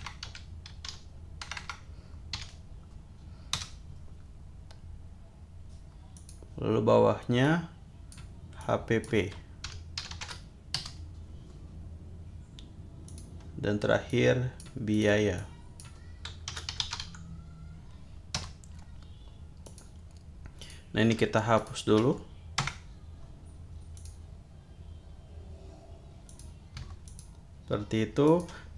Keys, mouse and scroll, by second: 0.0-2.3 typing, 3.6 Return, 6.1 click, 7.4 click, 8.6 click, 9.6 shift+h, 10.0 shift+p, 10.8 Return, 13.1 click, 14.1 click, 14.9 click, 15.4-16.0 drag, 16.2-17.5 typing, 18.4 Return, 19.6 click, 20.6-21.1 drag, 21.6 shift+click, 22.6 BackSpace, 23.9 click, 26.3 click, 27.0-27.7 drag, 28.2 click.